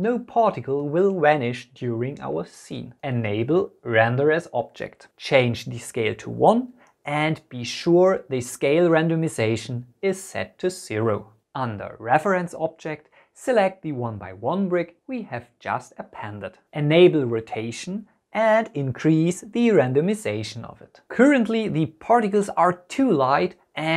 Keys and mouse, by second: 3.6 click, 4.4-5.7 drag, 6.6-7.6 drag, 10.2 click, 13.9-15.0 drag, 18.6-19.7 drag.